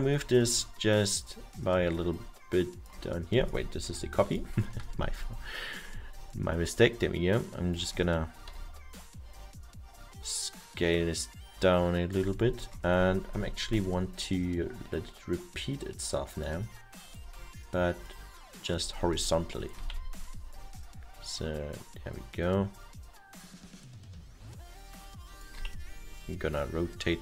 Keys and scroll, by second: 3.9 Delete, 8.7 r, 19.9 w, 25.6 e.